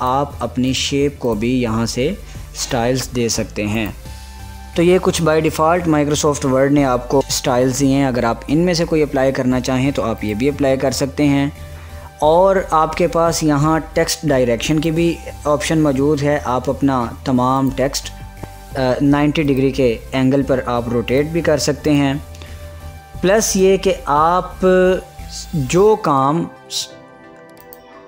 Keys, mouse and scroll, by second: 11.9 click, 16.3 click, 18.4 click, 21.1 click, 27.6 click.